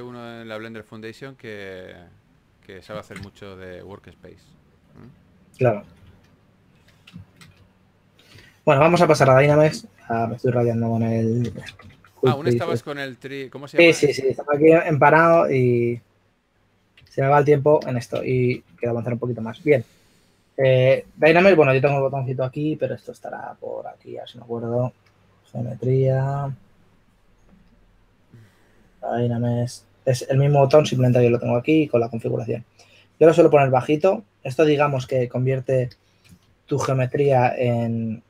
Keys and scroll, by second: 3.8 2, 6.1 2, 7.6 s, 9.4 shift+f, 36.4 shift+f.